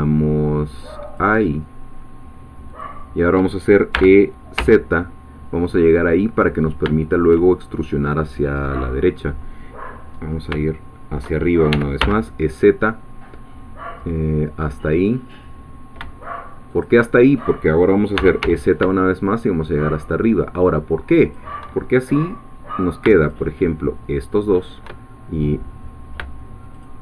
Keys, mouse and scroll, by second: 1.1 shift+click, 2.8 shift+click, 3.9 e, 4.6 z, 7.0 shift+click, 10.2 scroll down 2, 10.6 shift+middle click, 11.7 e, 12.0 z, 16.7 shift+click, 17.9-18.9 typing, 21.2 shift+click, 23.3 shift+click, 26.8 shift+click.